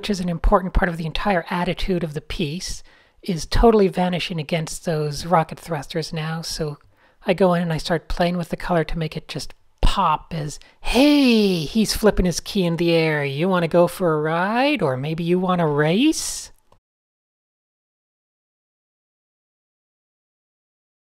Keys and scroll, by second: 0.0 super+a, 0.2 super+h, 1.1 super+a, 1.3 super+h, 2.2 alt+super+a, 3.8 typing, 5.3 super+z, 5.7 shift+super+a, 5.7 typing, 7.1 alt+shift+super+g, 7.2-8.1 typing.